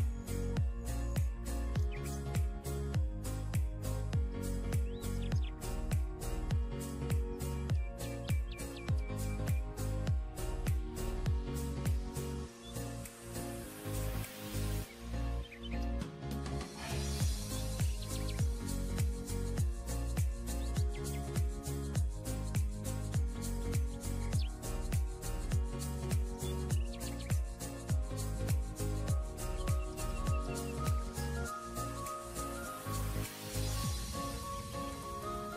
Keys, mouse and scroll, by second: 13.6 ctrl+click, 14.5 ctrl+e, 22.4 right click, 26.3 double click.